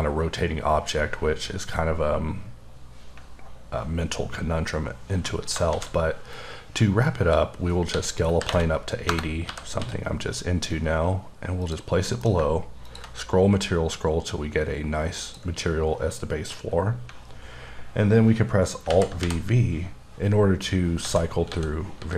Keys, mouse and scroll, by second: 1.6-2.0 scroll up 1, 5.7 a, 6.4 click, 7.9-9.8 typing, 9.1 KP_Enter, 11.6 click, 12.0 m, 12.8 ctrl+click, 13.3-13.9 scroll up 4, 14.4 scroll up 1, 15.2 click, 18.9 v, 20.2-20.8 scroll up 1, 20.8 scroll down 1, 21.0 s, 21.5 s.